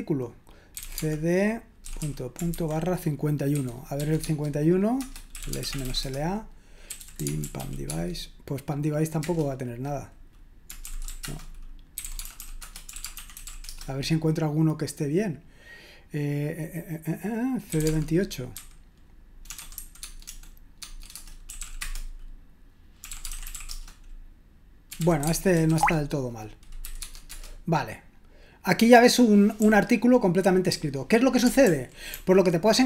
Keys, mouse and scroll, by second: 0.5-3.9 typing, 4.2 Tab, 5.0-7.8 typing, 9.2 Return, 10.6-13.9 typing, 17.5-27.3 typing, 21.1 Return, 29.6-31.3 typing, 31.6 ctrl+d, 32.1 ctrl+d.